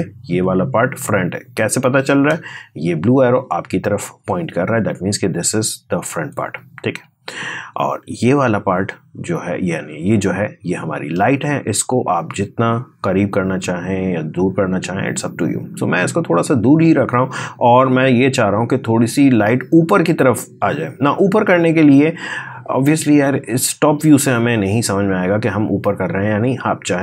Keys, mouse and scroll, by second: 1.3-2.1 scroll up 1, 2.1 space, 2.3 click, 2.6 space, 4.9 click, 5.0 space, 6.4-7.9 scroll down 1, 7.9 click, 8.9-10.0 scroll up 1, 10.0 space, 10.1 click, 10.5 space, 11.7-20.2 drag, 20.2 space, 20.4 click, 20.7 space.